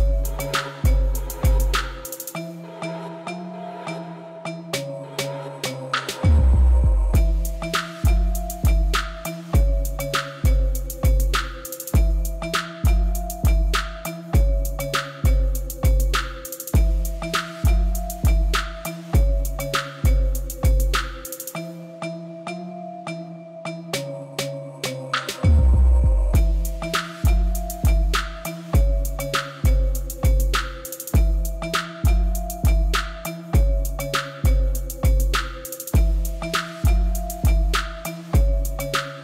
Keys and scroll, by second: 1.0 Tab, 1.3 shift+z, 2.6 shift+z, 3.5 g, 3.7 z, 6.5 g, 6.7 z, 9.6 Tab, 18.7 3, 21.7 Tab, 22.4 alt+a, 25.2 Tab, 26.8 Tab, 29.8 shift+d, 29.9 x, 32.7 shift+d, 32.9 y.